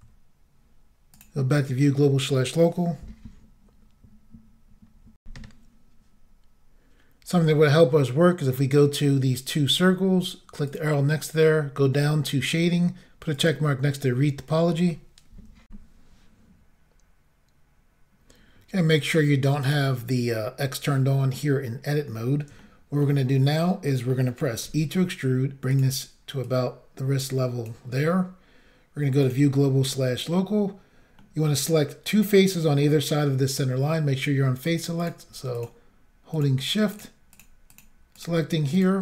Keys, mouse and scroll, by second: 1.2 click, 5.2 Insert, 10.7 click, 12.0 click, 13.3 click, 15.7 Insert, 19.6 click, 22.6 shift+middle click, 23.4-23.8 scroll down 1, 23.9 middle click, 24.6 e, 25.7 click, 26.4 click, 29.2 click, 29.9 middle click, 31.2 middle click, 35.0 click, 35.6 shift+click, 35.6 shift+double click, 36.3 shift+click, 36.9 shift+click, 37.7 shift+click, 37.8 shift+double click, 38.2 shift+click, 38.8 shift+click.